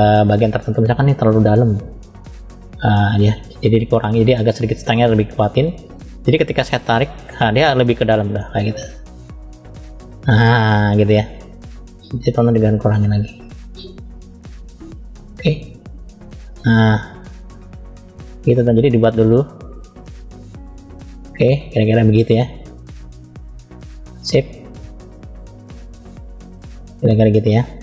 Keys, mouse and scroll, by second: 1.9 click, 2.7 click, 3.3 scroll up 2, 4.5 click, 6.3 click, 7.7 middle click, 7.7 scroll up 1, 9.1-10.4 drag, 10.6 middle click, 11.8 click, 13.7-14.9 middle drag, 15.5 click, 18.4 middle click, 19.5 click, 21.1 middle click, 22.2 click, 24.2-24.9 scroll down 2, 24.9 click, 26.6 click, 27.4 middle click.